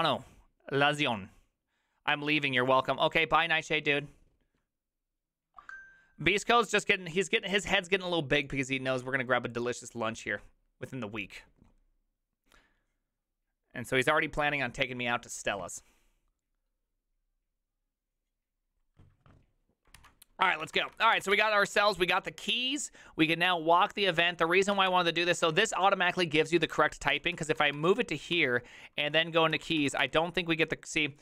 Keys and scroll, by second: 20.4-22.3 typing, 24.4 ctrl+c, 24.8 ctrl+:, 24.8-25.4 typing, 24.9 Return, 26.7 ctrl+c, 26.9-30.5 typing.